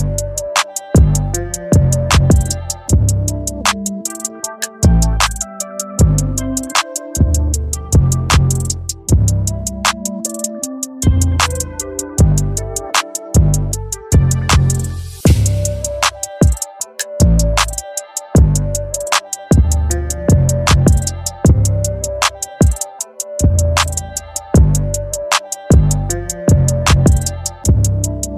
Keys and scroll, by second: 2.7 ctrl+j, 23.8 ctrl+l.